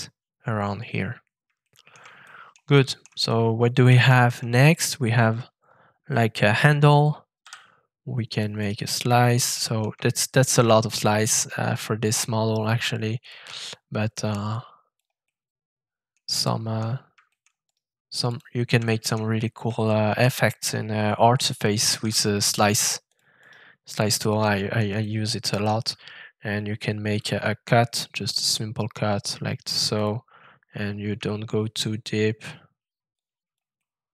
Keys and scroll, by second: 7.4 f, 21.9 shift+f.